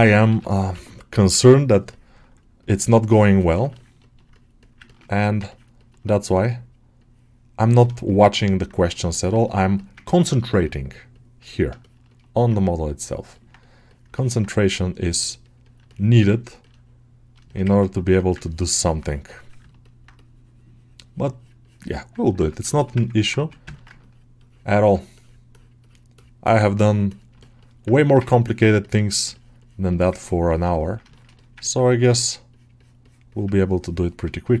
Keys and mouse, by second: 0.1 g, 0.6 ], 1.1 ], 2.1 ], 3.1 middle click, 3.4 middle click, 3.6 ctrl+alt+middle click, 3.9 alt+middle click, 4.2 right click, 5.1 middle click, 5.4 ctrl+middle click, 5.7 middle click, 6.2 right click, 7.7 middle click, 7.9 shift+middle click, 8.2 alt+middle click, 9.0 click, 9.3 middle click, 9.6 alt+middle click, 10.5 click, 11.3 middle click, 11.7 shift+middle click, 11.9 middle click, 13.2 alt+middle click, 14.0 middle click, 14.3-15.7 drag, 15.7 middle click, 16.2 ctrl+middle click, 16.5 alt+middle click, 17.3 ctrl+alt+shift+middle click, 18.3-19.5 ctrl+drag, 19.5 middle click, 19.7 middle click, 22.2 ctrl+r, 22.6 alt+shift+middle click, 22.9 ctrl+middle click, 23.1 middle click, 23.2 1, 23.6 alt+middle click, 24.2 ctrl+click, 25.4 click, 26.9 click, 27.3 shift+middle click, 27.5 middle click, 28.7 click, 30.1 ctrl+click, 31.0 alt+shift+middle click, 31.2 middle click, 31.5 ctrl+alt+middle click, 32.9-34.6 drag.